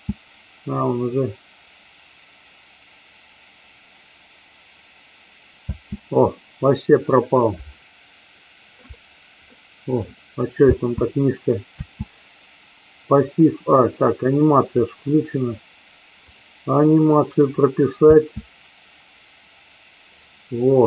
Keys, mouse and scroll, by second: 5.7 space, 6.1 middle click, 7.7 shift+scroll up 1, 7.8 shift+middle click, 9.6 middle click, 10.6 space, 14.7 click, 16.3 click, 17.3 click, 17.9 space.